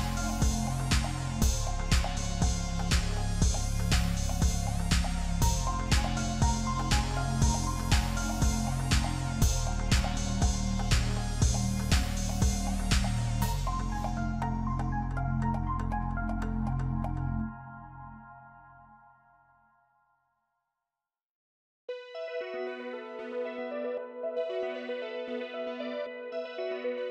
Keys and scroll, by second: 0.7 space, 1.4 ctrl+-, 4.0 ctrl+=, 5.1 ctrl+=, 5.2 ctrl+g, 6.0 ctrl+g, 6.1 ctrl+-, 9.1 Down, 9.2 Down, 9.3 Down, 9.4 Down, 12.0 Delete.